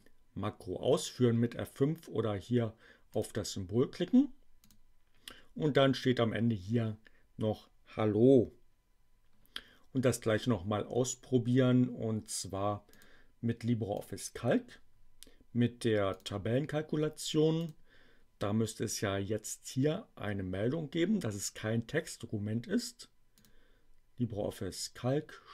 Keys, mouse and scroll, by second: 3.1 click, 4.6 click, 12.9 click, 14.0 click, 16.1 click, 17.5 click, 23.4 click.